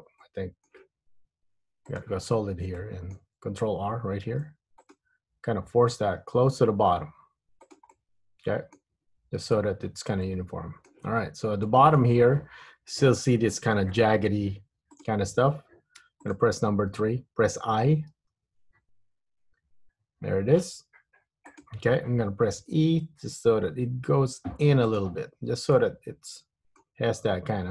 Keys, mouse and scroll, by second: 0.4 middle click, 2.1 click, 2.9 middle click, 4.5 ctrl+r, 8.0 middle click, 9.2 Tab, 9.7 middle click, 11.4 Tab, 11.8 middle click, 12.6-13.2 scroll up 2, 15.0 click, 16.2 3, 16.3 click, 18.5 i, 22.8 e, 25.6 Tab, 25.9 middle click, 27.5 Tab.